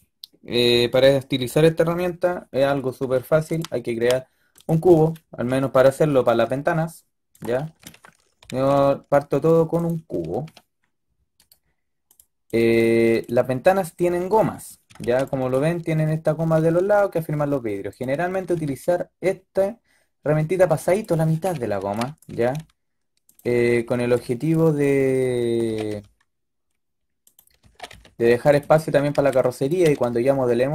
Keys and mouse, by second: 5.2-7.2 drag, 5.9 s, 8.3 g, 9.9 a, 10.1 a, 10.4 a, 11.5-12.0 drag, 13.2-14.9 typing, 16.4 g, 18.5 g, 21.2-22.2 typing, 23.3 a, 23.6 a, 23.8 a, 23.9 b, 25.7 g, 27.5-29.6 typing.